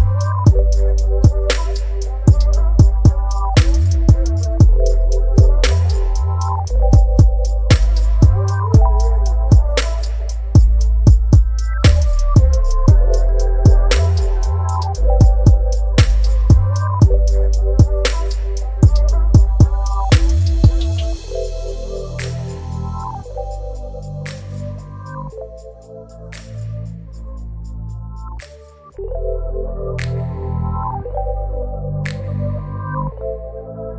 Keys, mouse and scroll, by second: 0.1 click, 3.0 right click, 4.9 click, 26.0 Delete, 27.4 click, 28.7 ctrl+t, 31.4-33.9 shift+drag.